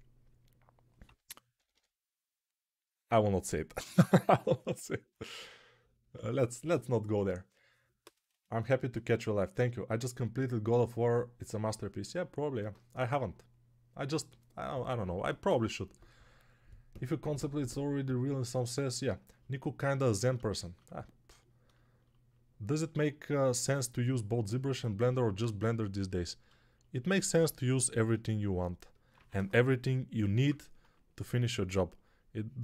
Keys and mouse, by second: 0.9 g, 1.4 ], 1.6 ], 25.8-29.0 ctrl+alt+drag, 28.5 alt+q, 29.0 1, 29.5-30.3 [.